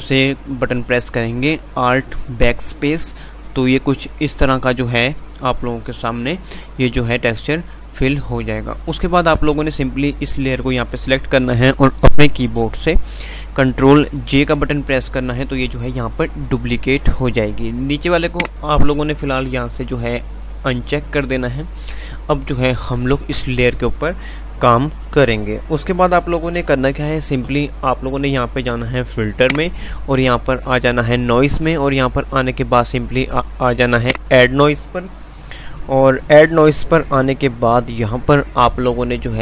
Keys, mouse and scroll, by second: 14.4 ctrl+j, 18.4 click.